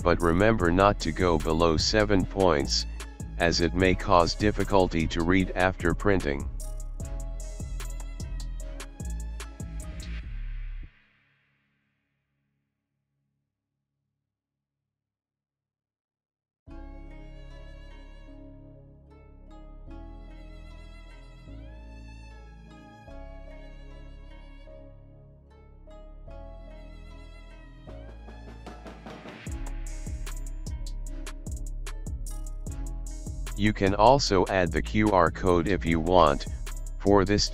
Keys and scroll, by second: 0.3 Up, 0.4 Up, 0.6 Down, 2.2 ctrl+shift+g, 2.6 ctrl+shift+g, 2.9 ctrl+shift+g, 3.1 ctrl+shift+g, 4.8 alt+space, 5.5 ctrl+z, 5.8 Down, 6.6 Down, 6.7 Down, 7.4 Down, 7.8 alt+space, 8.1 ctrl+z, 8.5 space, 10.0 Up, 10.8 ctrl+alt+z, 11.5 Down, 12.9 alt+space, 13.8 Delete, 14.7 alt+space, 15.2 ctrl+g, 22.2 ctrl+c, 22.3 ctrl+b, 23.2 ctrl+alt+shift+b, 24.2 alt+space, 26.4 alt+space, 28.4 alt+shift+space, 30.9 ctrl+alt+z, 32.3 alt+space, 34.3 alt+space, 35.7 space.